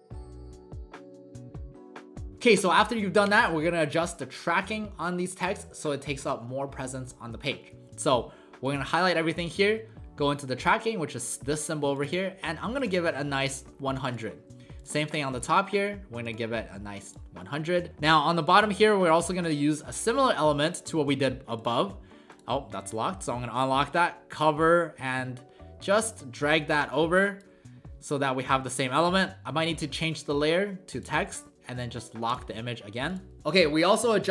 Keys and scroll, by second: 0.0 ctrl+z, 0.2 ctrl+a, 1.3-2.8 typing, 15.3 ctrl+a, 17.9 w.